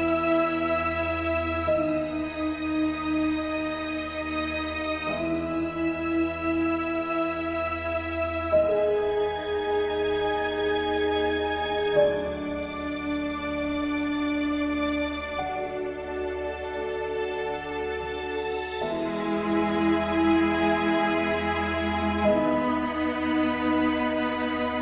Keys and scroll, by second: 0.3 ctrl+space, 4.2 ctrl+g, 5.4 ctrl+a, 10.4 ctrl+d.